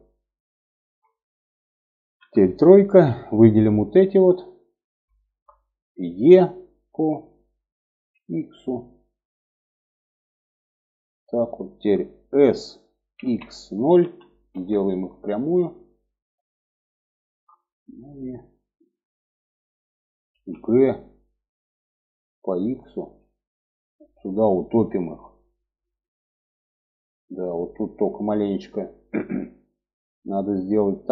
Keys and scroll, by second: 1.5 3, 5.5 e, 11.8 s, 19.7 g.